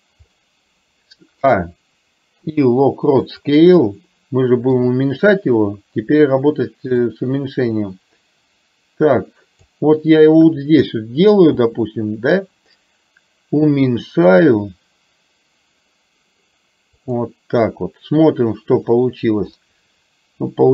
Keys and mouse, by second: 0.3-1.5 middle drag, 7.6-10.1 drag, 18.8 click, 19.6-20.7 middle drag.